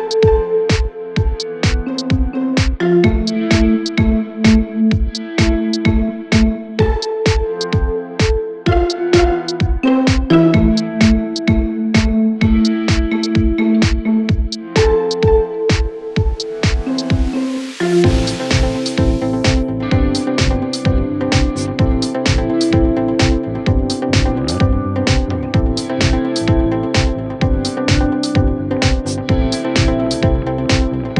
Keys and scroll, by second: 1.5 ctrl+z, 16.4 c.